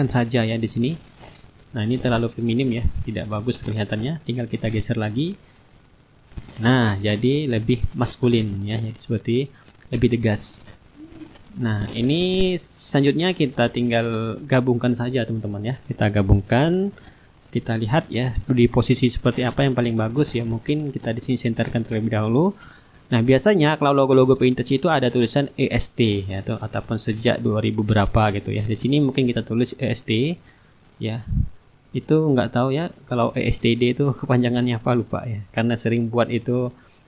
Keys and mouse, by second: 1.2-10.6 drag, 1.9 shift+right click, 3.3-10.6 right drag, 11.1-12.5 middle drag, 11.9-17.7 drag, 18.5 ctrl+g, 18.9 middle click, 19.7-25.5 shift+drag, 24.4-25.5 right drag, 26.4 click, 28.2-30.5 typing, 31.8 KP_2, 32.0 KP_0, 32.5 KP_1, 33.4 ctrl+a, 34.5 click, 35.8 click.